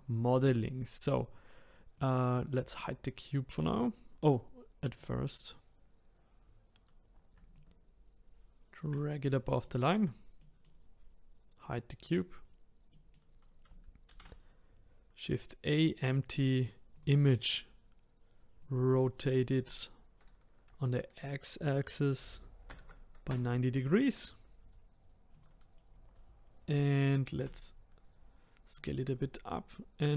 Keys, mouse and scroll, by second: 1.9 click, 4.9 click, 7.5 ctrl+click, 9.3-12.0 middle drag, 12.0 click, 12.9-14.1 middle drag, 14.1 shift+a, 18.6-22.7 drag, 25.3 click, 25.7-27.4 scroll up 3, 27.4 s.